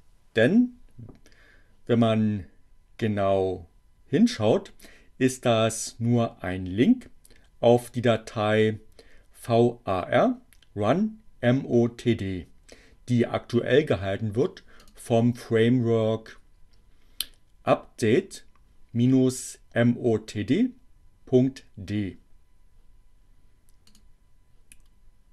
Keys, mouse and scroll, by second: 14.9 click, 23.7 click.